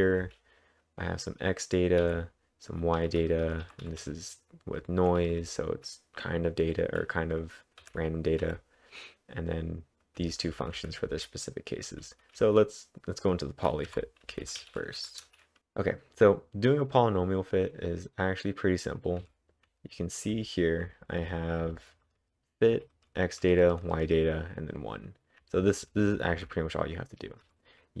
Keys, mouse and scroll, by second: 0.0-0.7 typing, 1.9-2.6 typing, 7.8-8.5 typing, 10.2-14.3 typing, 15.1 Return, 15.4-16.1 typing, 19.2-20.8 typing, 23.6-24.4 typing, 25.6-28.0 typing.